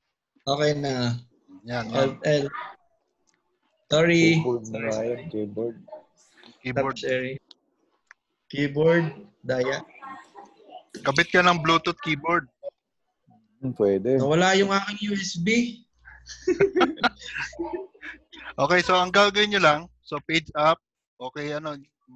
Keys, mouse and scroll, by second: 7.1 click, 17.3 click, 20.2 Page_Up.